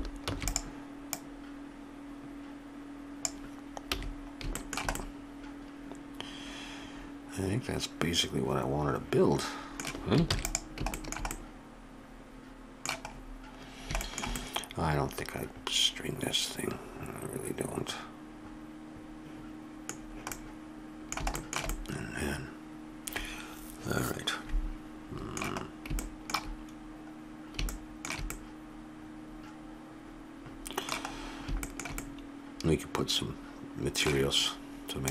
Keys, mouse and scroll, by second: 0.2 shift+d, 1.1-3.1 drag, 3.9 a, 5.6-6.9 middle drag, 10.3 ctrl+s, 13.2-15.2 middle drag, 20.0-23.5 middle drag, 26.0-28.7 middle drag, 30.2 middle click.